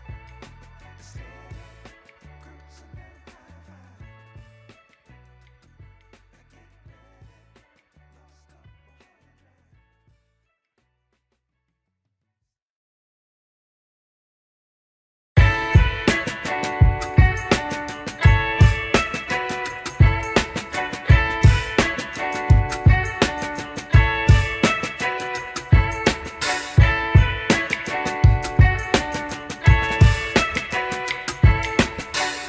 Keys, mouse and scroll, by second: 0.2-1.0 scroll up 2, 1.0 scroll up 1, 1.0 g, 2.5 click, 2.7 Tab, 3.0-4.0 scroll down 3, 3.4 Tab, 4.0 click, 4.1-4.8 scroll down 4, 4.8-6.0 middle drag, 6.2 scroll down 2, 6.4 shift+middle drag, 6.9 scroll down 1, 7.6 scroll up 2, 7.9 shift+middle drag, 8.5-9.0 scroll up 2, 9.0 KP_1, 9.8-10.6 scroll up 2, 11.0 shift+a, 16.6 s, 18.6-19.5 scroll up 5, 19.8-20.2 shift+middle drag, 20.7 g, 26.7 s, 31.1-32.3 scroll down 4.